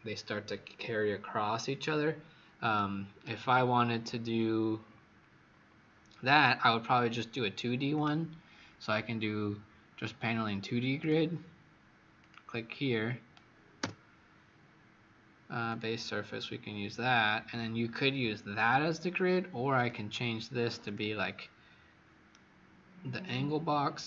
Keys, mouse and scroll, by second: 2.7 right click, 3.8-4.6 scroll down 4, 4.6-5.4 scroll up 1, 5.6 scroll up 9, 7.9 click, 13.8 Return, 15.6 click, 22.2 right click.